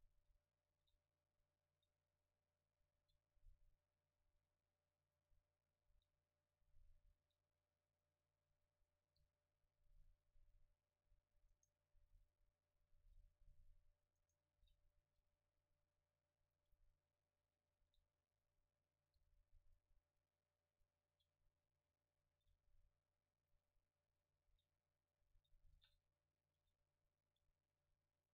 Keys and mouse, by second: 0.7 shift+d, 2.1-3.7 drag, 2.4-3.7 middle drag, 2.4-3.7 right drag, 2.9 g, 4.3 shift+d, 5.9 shift+d, 7.2 shift+d, 9.2 click, 9.2 g, 10.0-11.6 drag, 12.1-13.3 right drag, 12.1 f, 13.1 g, 14.2 right click, 14.6 g, 16.6-18.4 drag, 17.8 shift+d, 18.7-19.8 middle drag, 19.2 g, 19.8-21.6 drag, 22.3 shift+d, 23.6-24.7 drag, 24.3 g, 25.8 shift+d, 26.6 s, 27.2-28.3 drag, 27.9 a.